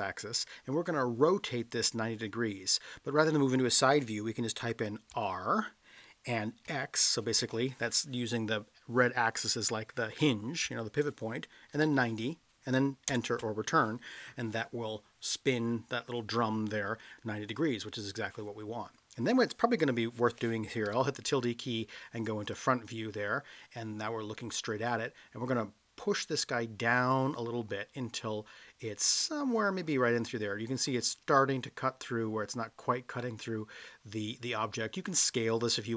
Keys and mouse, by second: 5.2 r, 6.7 x, 11.7 9, 11.8 0, 13.1 Return, 26.4-30.8 drag, 33.2-34.8 middle drag.